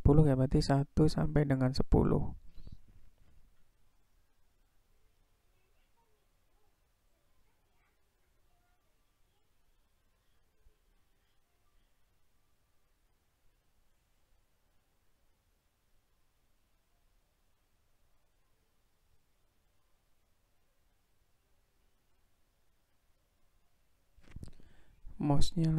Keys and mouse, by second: 0.0 click, 0.8-2.2 drag, 3.0-4.5 drag, 5.2-7.2 drag, 8.1 click, 8.8-11.0 drag, 11.9-13.5 drag, 14.3-18.9 drag, 20.9-23.4 drag.